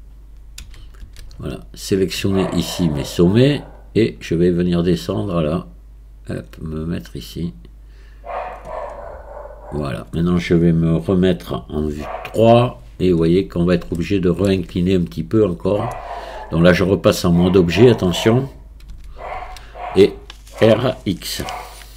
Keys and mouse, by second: 0.6 a, 1.1 a, 2.8 click, 4.8-8.5 drag, 11.9 KP_3, 14.0 shift+click, 15.9 Tab, 18.9 a, 19.3 a.